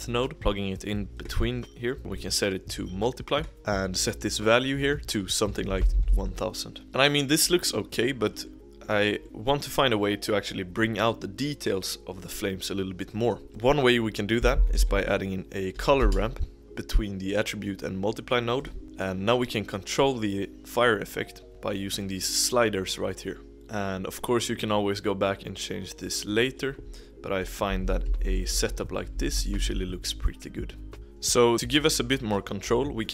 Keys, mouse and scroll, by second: 3.4 click, 5.2-6.4 drag, 6.4 0, 6.8-7.4 scroll up 1, 8.4 middle click, 8.9-9.2 scroll down 1, 9.2-13.0 middle drag, 13.0 click, 13.4 shift+a, 19.4-20.7 middle drag, 20.7-21.4 drag, 23.4-24.9 drag, 24.9-25.9 scroll up 2, 25.9 scroll up 1, 26.0-27.7 drag, 27.7-28.0 Right, 28.2 Right, 28.4 Right, 29.1 Right, 29.3-29.7 Right, 30.9 middle click, 31.0-31.7 drag, 31.9 middle click, 32.2-33.1 scroll up 1.